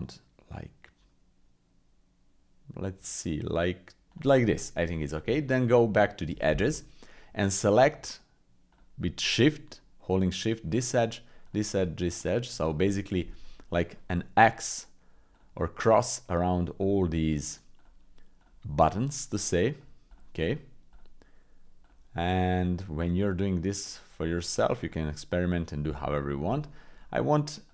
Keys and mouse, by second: 4.4 click, 4.8 middle click, 5.2 Tab, 6.8 middle click, 8.7 shift+click, 10.9 shift+click, 11.4-15.2 shift+drag, 15.3-16.8 shift+drag, 17.3 shift+click, 17.8-22.7 shift+drag, 23.2-24.5 shift+drag, 24.8 shift+click, 25.4 shift+click, 26.0 click, 26.6 shift+click.